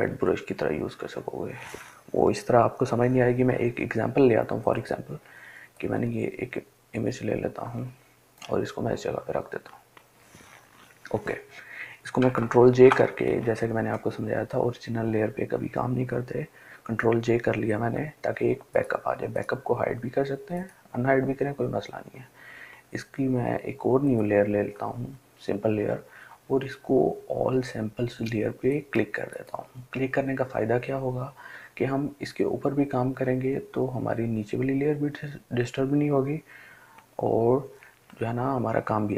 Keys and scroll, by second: 12.9 ctrl+j.